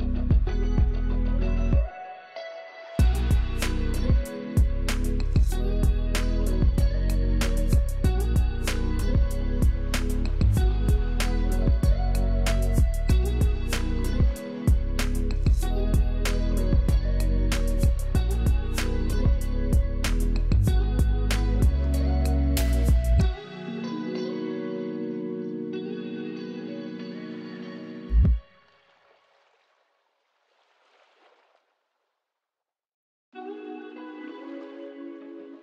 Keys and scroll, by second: 1.6 space, 8.1 space, 12.3 BackSpace, 16.4 F11, 19.4 F11, 26.2 F11, 27.2 alt+space, 27.7 alt+space, 30.2 space, 32.9 space, 33.8 z, 35.2 v.